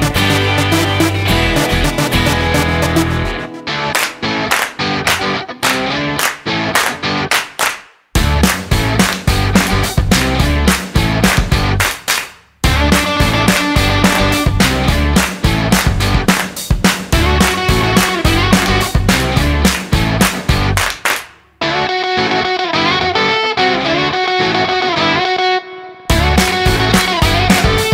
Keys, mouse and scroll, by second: 9.9 click, 12.0 click, 19.0 click, 23.2 click, 24.7 click, 26.2 click, 27.1 click.